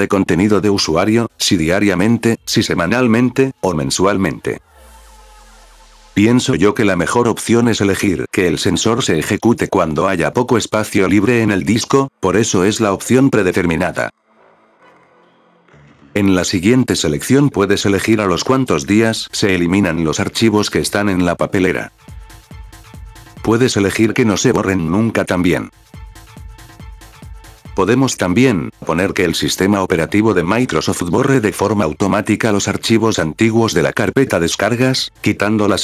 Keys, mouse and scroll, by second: 0.2 click, 2.0 click, 9.7 click, 16.4-18.8 drag, 19.2 click, 23.1 click, 25.4 click, 26.6 click, 27.7-28.2 scroll down 4, 30.7 click.